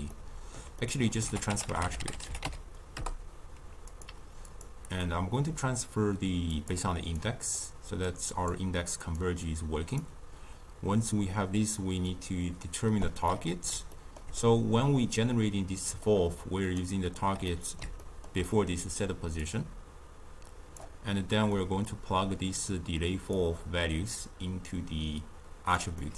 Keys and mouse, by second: 1.2 ctrl+a, 4.4-7.1 drag, 8.0 click, 9.1 drag, 12.0 drag, 13.2-16.7 middle drag, 16.7 shift+right click, 17.4-19.4 middle drag, 19.4-21.5 drag, 21.5-23.3 middle drag, 23.3 click, 25.9-26.1 middle drag.